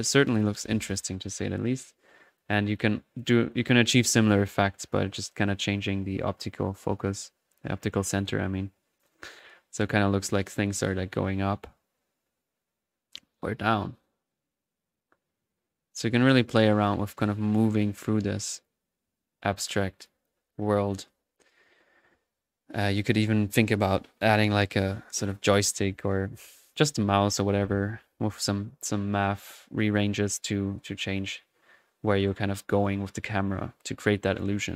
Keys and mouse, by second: 0.2-21.6 drag, 21.6-22.7 typing.